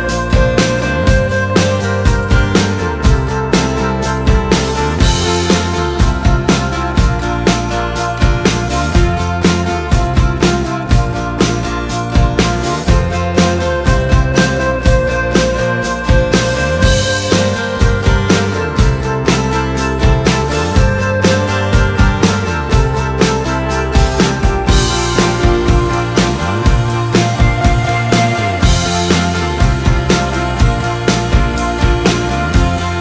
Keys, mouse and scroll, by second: 1.2-1.8 scroll down 1, 2.1-6.2 middle drag, 9.5-16.8 drag, 19.0-25.6 drag, 28.2-32.5 drag.